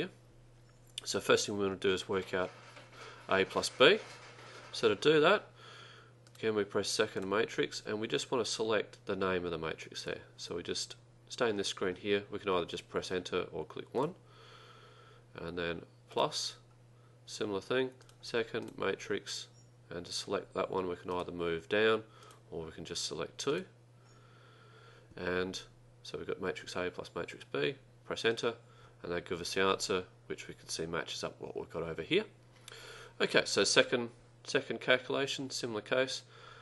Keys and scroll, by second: 7.0-7.8 typing, 14.1 1, 21.2 Down, 22.3 Up, 23.6 2, 28.4 Return.